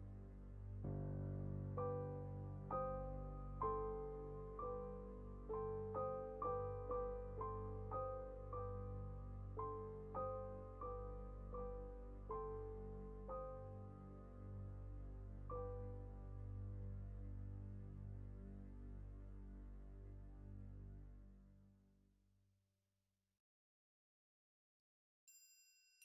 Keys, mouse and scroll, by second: 4.5-5.5 drag, 5.5-5.9 middle drag, 5.9 KP_7, 6.1-6.9 scroll down 1, 6.9-7.2 scroll up 1, 7.2-7.7 shift+middle drag, 7.7 KP_0, 8.1 ctrl+v, 8.5 alt+a, 8.8-9.1 shift+middle drag, 9.1-9.5 scroll up 1, 9.5-9.8 shift+middle drag, 9.8 z, 10.4 shift+middle drag, 10.5 scroll up 1, 10.6 click, 10.9 scroll down 2, 11.1 z, 11.7 scroll down 3, 12.2-13.5 drag, 13.5 shift+middle drag, 13.7 scroll up 3, 16.6-17.5 drag, 18.8 alt+a, 19.0 scroll down 3, 19.3 click, 20.0 middle click, 20.1 scroll up 2, 20.5 scroll down 1, 20.7-21.2 shift+middle drag, 21.2 scroll up 4, 21.6 click, 21.9 middle click, 22.2 g, 22.6 middle click, 22.8-23.1 scroll up 2, 23.1 click, 23.7-25.2 middle drag, 25.2 click.